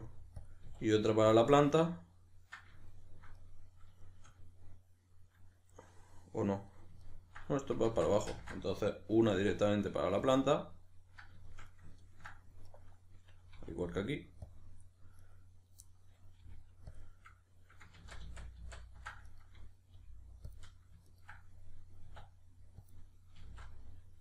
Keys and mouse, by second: 0.5 click, 0.7 e, 1.4 click, 1.8-12.7 middle drag, 7.9 ctrl+z, 10.3 click, 12.7 right click, 13.5 e, 14.5 click, 15.2 right click, 15.9-17.0 middle drag, 16.4 g, 17.0 click, 18.0 ctrl+z, 19.3 right click, 19.9 g, 20.6 click, 21.1 ctrl+right click, 22.1 e, 22.9 click, 23.4 s.